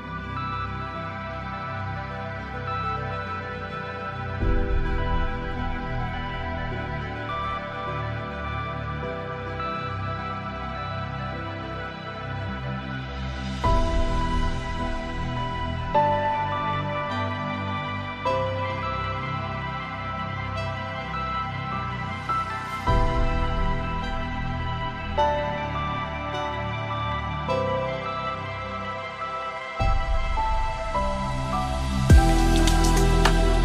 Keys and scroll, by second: 6.5 ctrl+z, 27.3 ctrl+space, 30.9 ctrl+j.